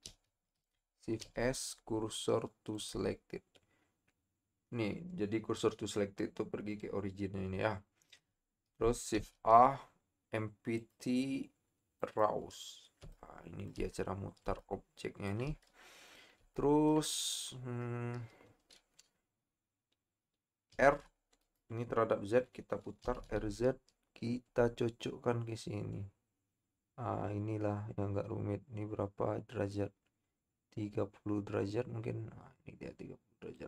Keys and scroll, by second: 0.0 ctrl+z, 1.2 shift+s, 9.2 shift+a, 20.9 r, 23.2 z.